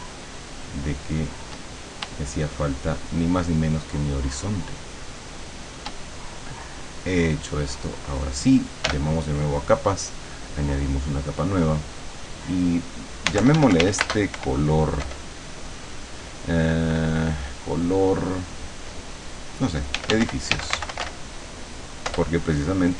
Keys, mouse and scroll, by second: 2.0 shift+click, 2.9-5.9 shift+drag, 7.7 click, 8.9 l, 10.6 click, 11.9 click, 13.0-14.4 typing, 19.8-21.6 typing, 22.1 Return.